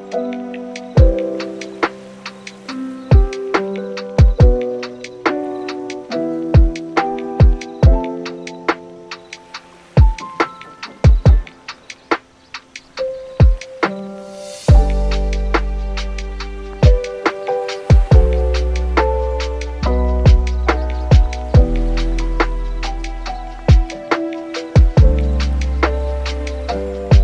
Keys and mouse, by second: 0.0 super+s, 0.2 click, 0.4 click, 0.9 click, 2.9 click, 3.8 click, 4.0 click, 4.5 click, 5.6 click, 6.2-8.2 middle drag, 8.4 middle click, 10.1 shift+click, 10.6-11.7 drag, 12.1 click, 12.6 shift+click, 13.5 shift+click, 14.3-15.6 drag, 15.9 click, 16.1 shift+click, 16.3 shift+click, 17.0 click, 18.0 click, 18.2 middle click, 18.5 middle click, 19.0 super+s, 19.1 middle click, 19.5 middle click, 20.4 middle click, 21.2 click, 22.1 click, 22.7 shift+click, 24.2 click, 24.9 click, 25.6 click, 26.9 middle click.